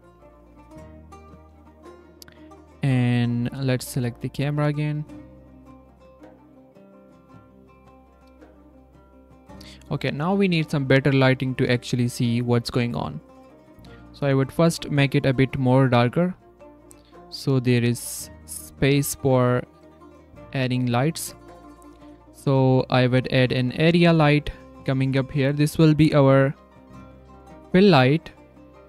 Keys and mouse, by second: 3.6 click, 4.1 click, 6.8-8.2 drag, 10.2 click, 11.4 click, 11.6 click, 12.4 click, 15.8 click, 16.0 z, 16.6 drag, 17.2 drag, 17.5 s, 17.6 drag, 17.9 click, 23.3 shift+r, 24.0 g, 27.7 g, 28.7 r.